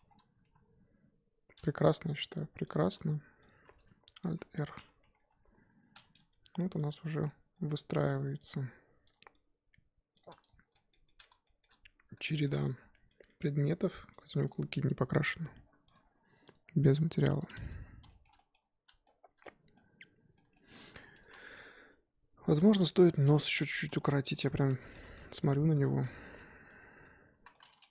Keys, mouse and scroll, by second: 0.0-0.4 scroll down 2, 0.4 KP_1, 2.2 shift+click, 2.7 shift+click, 2.9-4.2 middle drag, 4.2 alt+r, 4.7-5.1 scroll up 1, 5.1 scroll down 3, 5.3 KP_1, 6.3 g, 7.3 click, 7.5 g, 8.4 click, 8.7 g, 9.1 click, 9.3 g, 10.5 click, 10.7-13.4 middle drag, 13.4-14.2 scroll up 2, 14.2 click, 14.5 click, 17.1-17.5 drag, 17.8 scroll up 1, 18.1-20.7 shift+middle drag, 20.7-21.2 scroll up 2, 21.2 click, 21.3-21.8 middle drag, 21.8 KP_1, 22.9 Tab, 23.2-23.8 middle drag, 23.8 z, 23.9-24.3 middle drag, 24.3 z, 24.6 middle click, 25.2 z, 25.4 middle click, 25.9 1, 26.0-27.0 middle drag, 27.0 click, 27.4 z, 27.5-27.9 middle drag.